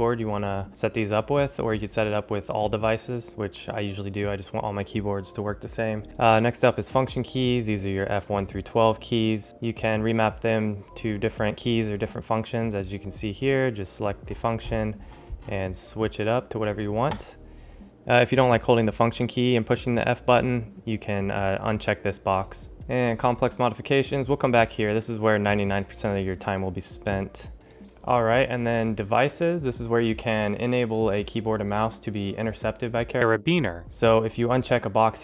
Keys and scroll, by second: 27.8 ctrl+alt+shift+super++.